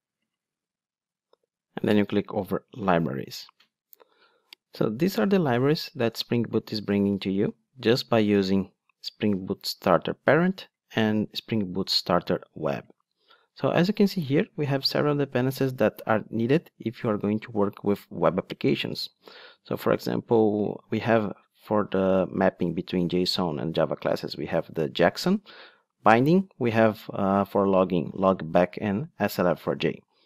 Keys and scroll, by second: 0.6 super+Down.